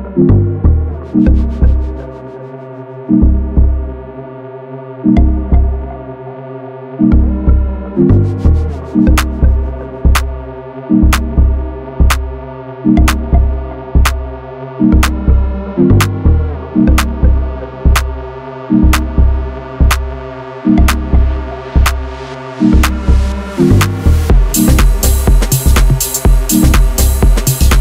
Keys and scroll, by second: 4.0 ctrl+v, 12.3 2, 12.7 a, 16.3 w, 20.4 KP_7, 27.1 a.